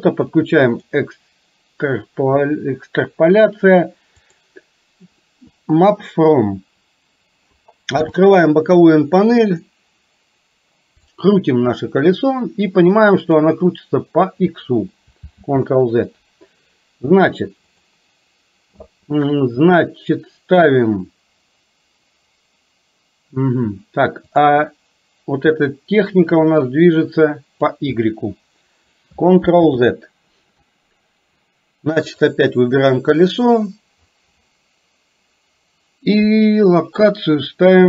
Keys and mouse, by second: 0.7 click, 4.4 click, 8.0 n, 11.3-13.5 drag, 15.5 ctrl+z, 17.7 click, 24.5 click, 26.6-27.9 drag, 29.5 ctrl+z, 32.1 click.